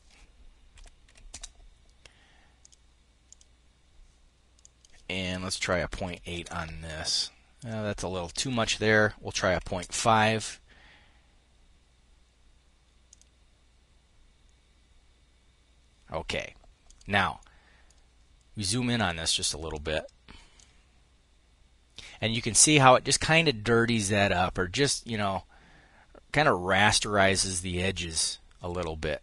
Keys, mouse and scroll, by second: 0.1 ., 0.5 8, 0.7 Return, 2.0-3.1 drag, 4.1 click, 5.1 ., 5.5 8, 5.8 Return, 7.7 click, 8.7 ., 9.0 5, 9.3 Return, 12.5 click, 16.2 click, 18.4-20.2 drag, 22.0-25.3 drag.